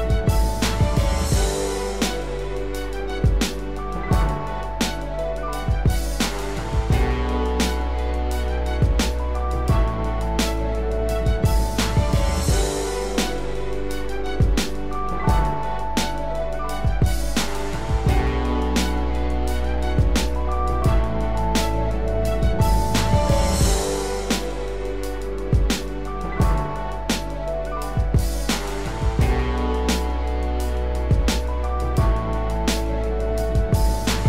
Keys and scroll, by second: 5.9 ctrl+-, 8.4 ctrl+-, 10.9 ctrl+=, 14.2 ctrl+z.